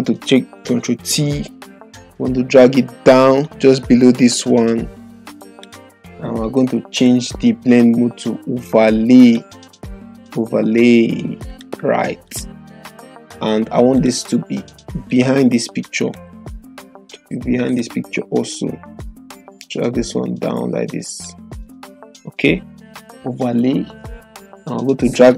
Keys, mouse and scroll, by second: 0.8 ctrl+t, 3.4-5.6 drag, 9.2-16.3 drag.